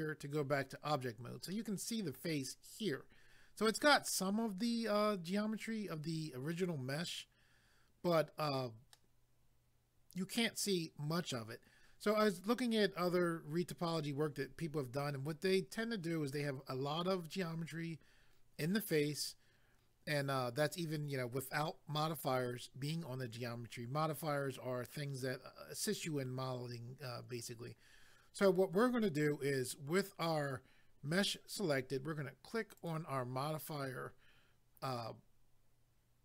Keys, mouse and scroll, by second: 1.5 middle click, 8.9 middle click, 32.8 click.